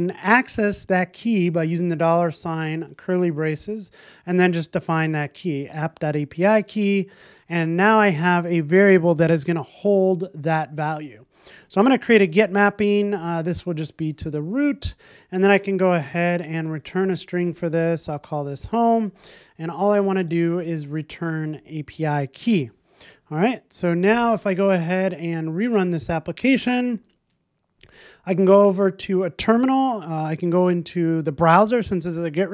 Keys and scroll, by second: 6.1 Return, 7.8 super+s, 12.3 alt+shift+Left, 12.4 Return, 21.9 Return, 22.7 super+s, 25.7 ctrl+r.